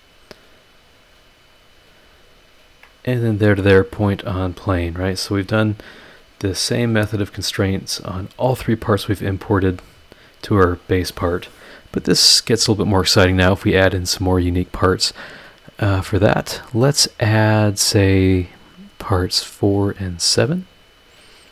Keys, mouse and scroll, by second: 1.5 click, 2.6 ctrl+click, 4.2 click, 5.5 click, 5.9 scroll down 2, 6.4 scroll up 2, 6.8-8.1 middle drag, 9.3 click, 10.5 click, 20.9 click.